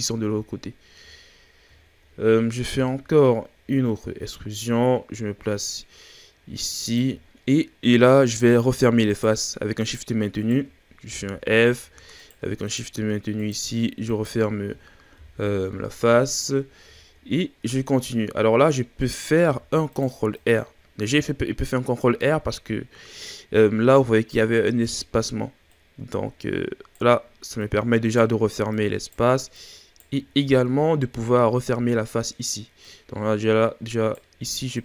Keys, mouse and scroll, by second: 0.5-1.4 shift+scroll up 4, 1.4-2.3 scroll up 4, 2.7 e, 7.2-7.6 shift+scroll down 1, 7.6-8.2 scroll up 4, 8.2 right click, 9.0 shift+right click, 9.8 shift+right click, 10.4 shift+right click, 11.1 f, 11.7-12.1 shift+scroll up 4, 12.1 right drag, 12.6 shift+right drag, 13.4 shift+right drag, 14.1 shift+right click, 15.1 f, 15.4-15.8 scroll down 3, 15.8-16.5 shift+scroll up 4, 16.5-16.8 ctrl+scroll down 2, 16.8-18.3 shift+scroll up 3, 19.3 ctrl+r, 21.3-22.2 shift+scroll up 5, 22.2-23.6 shift+scroll down 4, 25.6 right click, 27.6 right click, 28.7 right click, 29.5 right click, 30.2-31.2 shift+scroll down 5, 31.2-32.8 scroll up 1, 32.8 right click, 34.7 right click.